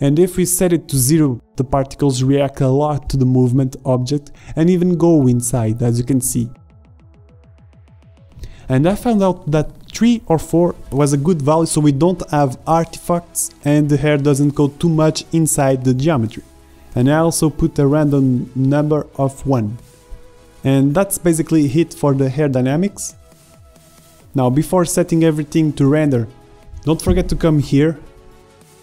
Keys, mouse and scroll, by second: 0.3 Left, 1.0-3.4 drag, 3.4 shift+Left, 3.5 alt+a, 11.2-13.1 drag, 13.1 alt+a, 19.3 middle click, 23.6 click.